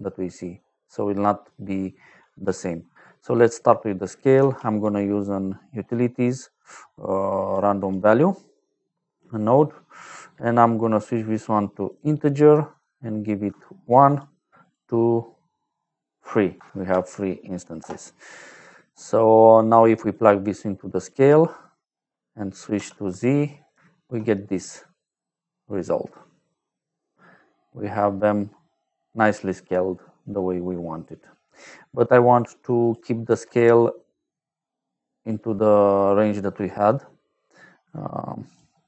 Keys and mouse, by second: 1.4 right click, 3.0 middle click, 4.3 shift+a, 7.4 click, 8.2 middle click, 9.4 middle click, 10.9 click, 11.8 click, 13.4 1, 14.0 click, 14.5 click, 16.5 KP_3, 17.7 Return, 19.1 click, 20.0 click, 22.7 z, 23.8 shift+middle click, 24.3 middle click, 26.1 middle click, 27.3 middle click, 32.3 click, 32.7 click, 33.2 shift+a, 38.4 click.